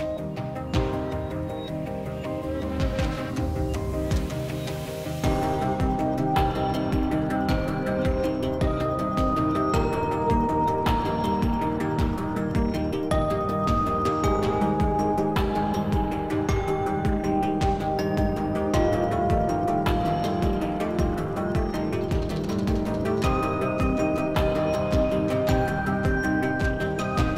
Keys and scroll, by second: 1.5 s, 15.1 s, 19.2 s, 24.0 s.